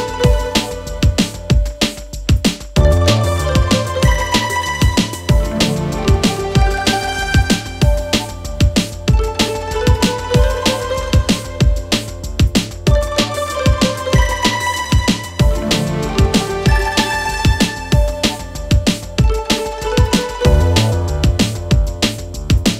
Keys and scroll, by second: 0.6 4, 2.4 3, 3.1 ], 4.4 4, 12.4 3, 21.8 ].